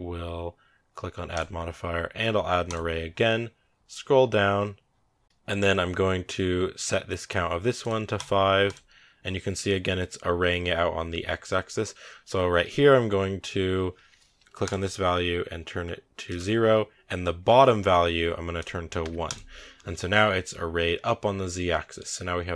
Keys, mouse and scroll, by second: 2.6-8.6 drag, 8.8 scroll down 7, 16.1-19.2 drag, 19.6-20.3 scroll up 5, 21.5 scroll down 1, 21.6-22.5 middle drag.